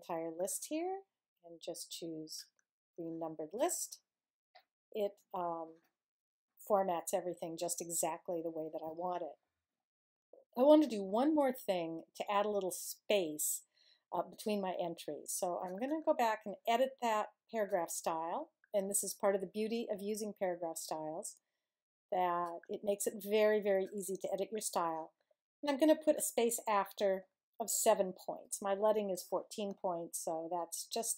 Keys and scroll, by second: 28.3 7.